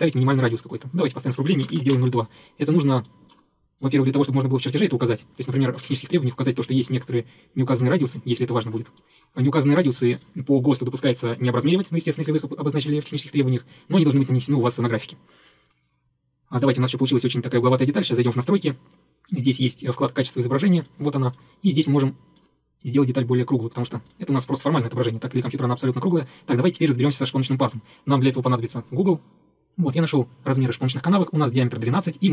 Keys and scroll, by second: 1.4-2.4 typing.